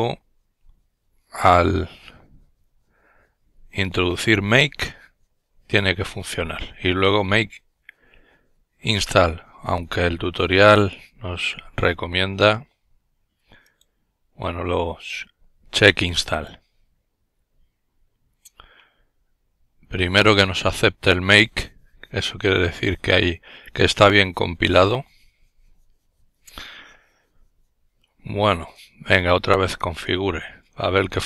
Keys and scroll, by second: 29.3-31.2 typing.